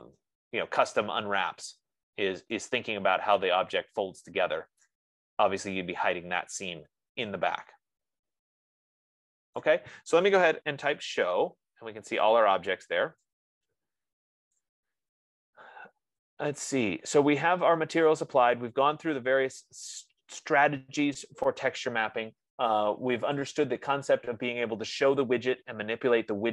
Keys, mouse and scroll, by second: 0.4 click, 2.4-3.2 scroll, 5.1 right click, 9.9 right click, 10.9-11.8 typing, 12.8 scroll, 14.9 right click, 15.8-16.1 scroll, 16.5-17.1 scroll, 17.3-18.1 scroll, 23.9 click, 25.4 F15.